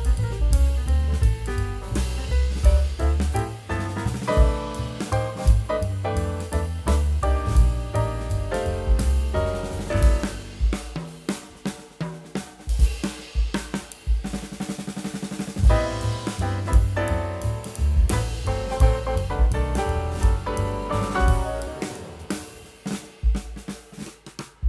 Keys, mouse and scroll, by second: 17.8 space, 21.1 space, 21.2 alt+click.